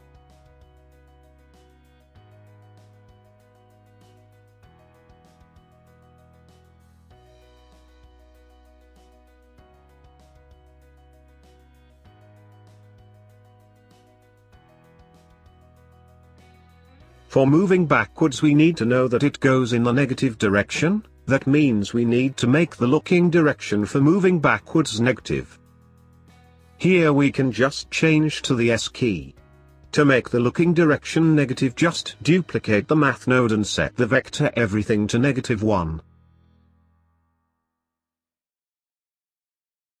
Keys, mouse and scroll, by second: 1.0-4.8 drag, 5.4 e, 8.9 click, 12.0 click, 12.8-13.3 scroll down 2, 13.3-15.2 middle drag, 15.2-15.8 scroll down 2, 15.8-17.4 middle drag, 17.4 click, 20.7 click, 21.4 click, 22.5 scroll down 1, 22.6 middle click, 23.1 shift+d, 25.2 scroll up 3, 25.4 middle click, 26.2 click, 27.0 click, 27.9 middle click, 29.4 click, 30.0 middle click, 30.7 shift+d, 33.4-36.4 drag, 36.8 click, 38.1-40.0 middle drag.